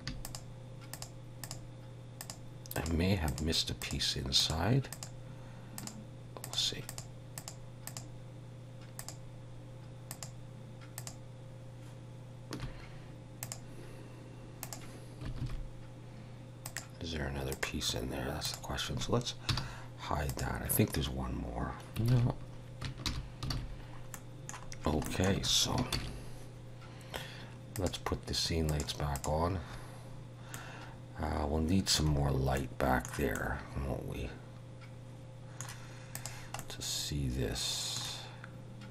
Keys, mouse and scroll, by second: 0.3 shift+click, 1.0 shift+click, 1.5 shift+click, 2.4 shift+click, 2.9 shift+click, 3.3 shift+click, 3.8 shift+click, 4.4 shift+click, 5.5 shift+click, 5.9 shift+click, 6.5 shift+click, 7.0 shift+click, 7.5 shift+click, 8.0 shift+click, 9.0 shift+click, 10.1 shift+click, 11.0 shift+click, 13.4 click, 15.4 alt+a, 16.7 click, 17.5 click, 18.6 click, 19.5 h, 20.3 click, 22.2 alt+a, 23.1 alt+h, 23.6 alt+a, 23.8-24.2 scroll down 3, 24.2 middle click, 24.8 scroll down 2, 25.1 shift+middle click, 26.0 ctrl+s, 27.8 click, 30.6 middle click, 32.1 scroll down 4, 32.6 middle click, 33.4 middle click, 36.2 click, 36.6 middle click.